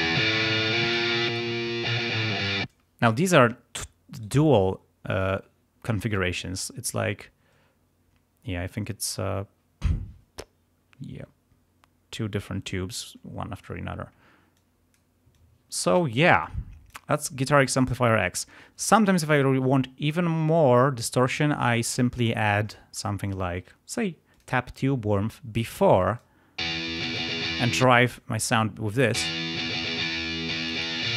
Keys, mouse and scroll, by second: 0.8 click, 1.3 click, 2.7 space, 4.1 right click, 13.6 click, 14.6 click, 15.3 click, 16.4 click, 20.5 right click, 22.5-23.1 scroll down 2, 24.3 click, 25.6 click, 26.6 space, 26.9 click, 27.8 space, 28.1 click, 29.1 space, 30.6 click.